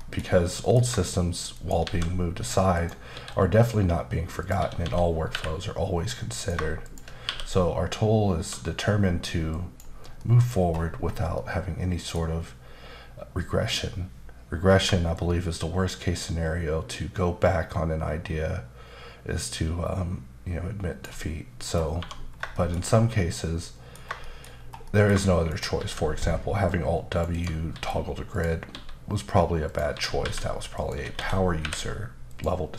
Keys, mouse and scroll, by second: 0.0 shift+middle click, 1.5 shift+right click, 1.8 shift+a, 2.7 click, 3.1 s, 4.4 click, 4.6-5.3 typing, 6.3 click, 6.8 shift+click, 7.2 q, 9.5 click, 10.2 middle click, 10.5-11.3 scroll up 5, 11.3 middle click, 15.1 shift+click, 21.6-22.0 scroll down 2, 22.0 1, 22.3 scroll down 1, 22.6 shift+middle click, 24.2 shift+middle click, 24.5 scroll up 1, 24.8 middle click, 25.5 shift+right click, 25.7 shift+a, 26.6 click, 27.3 double click, 27.7 s, 28.3 click, 28.7 s, 29.6 click, 29.9-31.6 typing, 30.8 click, 32.3 click.